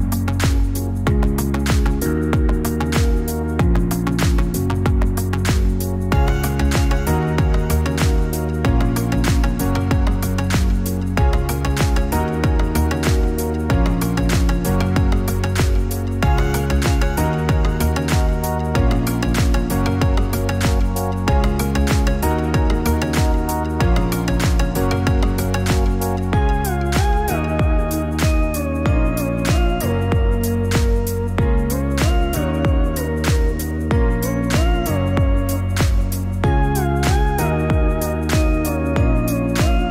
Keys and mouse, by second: 2.3 a, 8.0 click, 8.1-18.0 drag, 25.1-26.4 drag, 29.5 click, 34.9-39.2 drag.